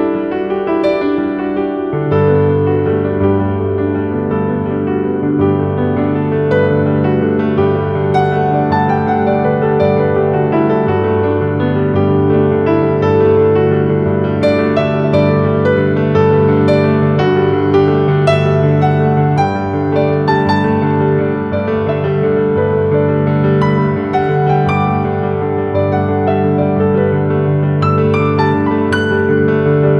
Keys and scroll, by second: 0.6 ctrl+q, 2.0 F2, 3.7 space, 4.3 c, 4.6 Escape, 7.9 space, 8.6 Delete, 9.5 shift+F2, 18.3 space, 18.5 Escape, 19.6 ctrl+z, 26.3 F3, 27.9 Escape.